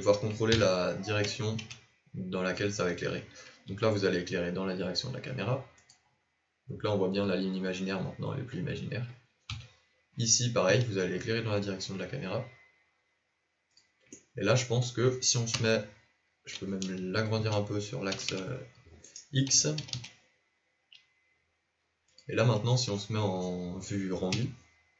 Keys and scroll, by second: 0.5 KP_3, 1.6 KP_1, 3.6 r, 9.4 KP_7, 10.6 r, 15.6 KP_0, 17.3 s, 19.5 s, 24.3 z.